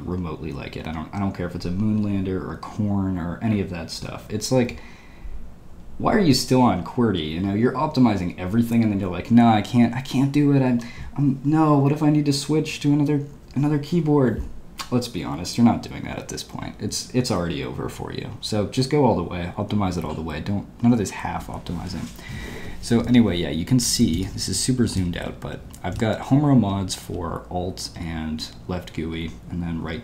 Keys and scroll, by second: 23.1 Escape, 23.8-26.6 typing.